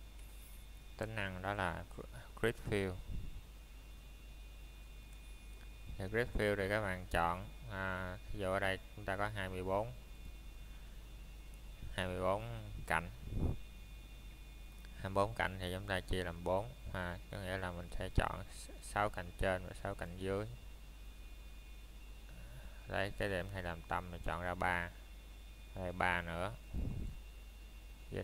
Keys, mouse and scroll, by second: 1.0 scroll up 1, 2.1 middle click, 3.0-3.6 scroll down 1, 3.6 middle click, 4.4 scroll up 1, 6.6 scroll down 1, 7.2 middle click, 7.5 scroll up 1, 9.1 middle click, 9.4 scroll up 1, 12.7 scroll up 1, 12.9 alt+click, 15.7 x, 16.5 click, 17.3 scroll down 1, 17.6 middle click, 20.4 scroll up 1, 23.2 shift+Num_Lock, 23.2 scroll up 1, 23.3 shift+middle click.